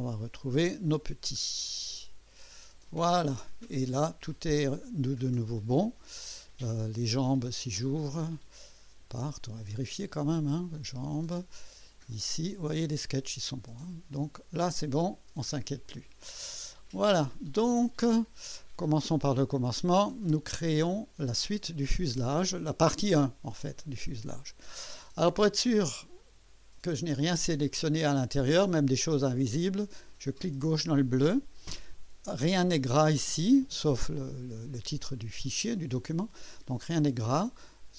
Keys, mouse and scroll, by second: 3.3-3.9 drag, 6.8 click, 9.5 click, 10.8 click, 12.1 click, 12.7 scroll down 1, 14.6 click, 15.9 click, 16.7 click, 17.7 click, 19.9-21.3 drag, 20.6 right click, 27.1 click, 30.4 click.